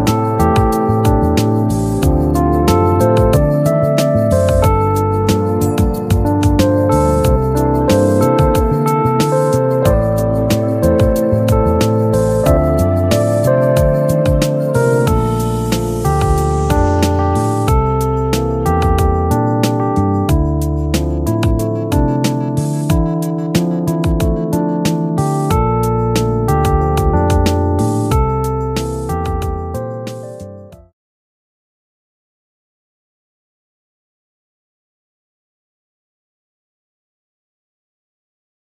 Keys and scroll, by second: 3.7 ctrl+g.